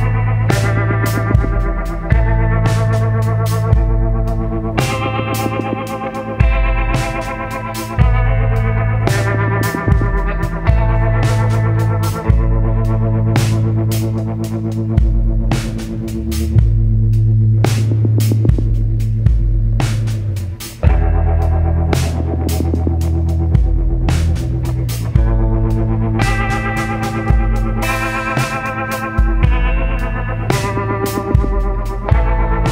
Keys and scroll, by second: 13.7 ctrl+t.